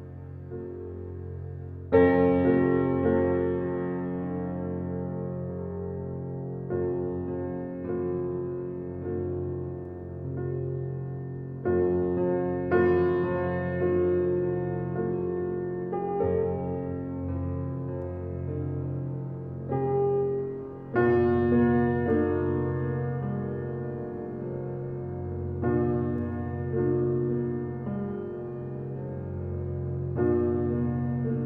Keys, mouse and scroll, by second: 0.6 scroll up 1, 1.3-2.5 scroll down 1, 3.9 scroll up 1, 4.4 scroll down 1, 5.0 scroll up 1, 5.4 scroll down 1, 7.9 scroll up 1, 8.5-10.1 scroll down 1, 10.1-10.7 scroll down 1, 11.5 scroll up 1, 12.5 scroll down 1, 18.9 click, 21.5 right click, 23.0 click, 24.2 scroll down 1, 26.2 scroll down 1, 28.3-29.7 drag, 29.7-30.5 scroll down 1.